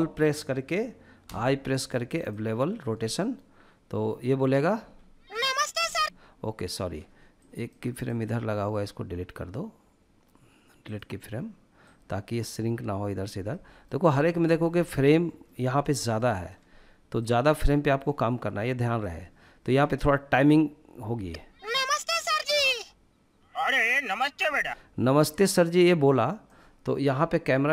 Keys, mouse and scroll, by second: 0.6 i, 4.2 space, 5.2 space, 6.8-7.4 drag, 7.4-10.4 right drag, 11.3-12.9 drag, 12.9-13.4 middle drag, 13.4-13.8 scroll down 1, 14.3 scroll down 4, 14.5-15.0 shift+middle drag, 15.0 scroll down 1, 15.3-15.9 shift+middle drag, 16.6 click, 20.5 space, 23.8 space, 24.8-25.8 drag, 27.3 click.